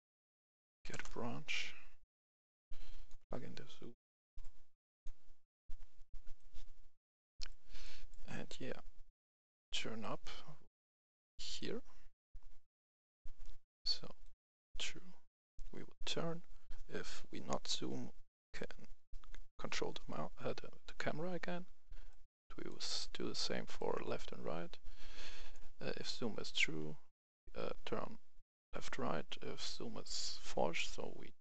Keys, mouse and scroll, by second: 0.7 i, 0.8 f, 0.9 Return, 2.3 click, 3.5-7.3 drag, 7.3 right click, 7.8-23.5 drag, 24.5-31.4 drag.